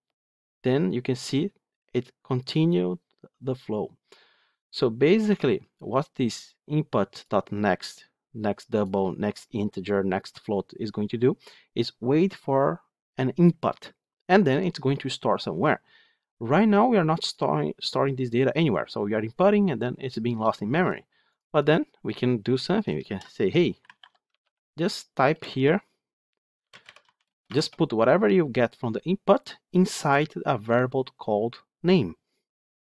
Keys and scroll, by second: 5.2 F9.